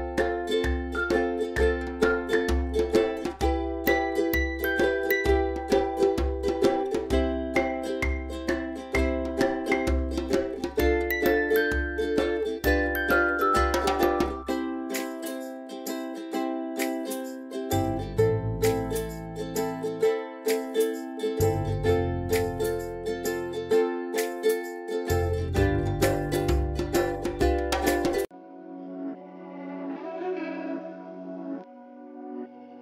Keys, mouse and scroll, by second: 0.2 scroll up 1, 0.4 space, 1.5 click, 1.7-2.1 space, 3.2 click, 6.2-8.8 typing, 6.6 click, 7.3-7.7 click, 7.9 scroll down 1, 8.3 click, 17.6 click, 19.1 p, 20.5 click, 22.9-24.0 drag.